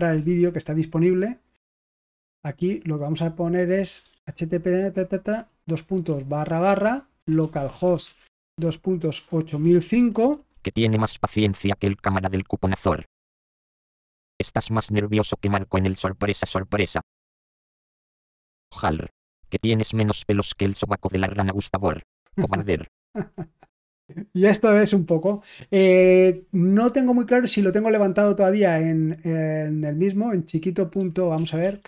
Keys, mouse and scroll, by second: 0.1 alt+f, 0.4 alt+f, 1.8-3.9 BackSpace, 4.0 BackSpace, 5.2-10.4 typing, 13.8 ctrl+p, 14.2 Return, 17.8 ctrl+p, 18.5 Return, 31.3 ctrl+p, 31.5 ctrl+p, 31.7 ctrl+p.